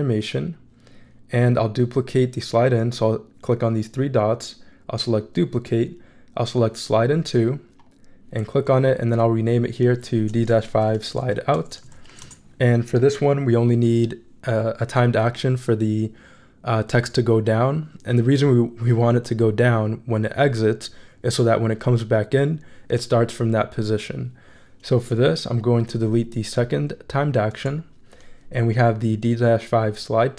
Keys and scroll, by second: 10.7-12.6 typing, 27.5 BackSpace.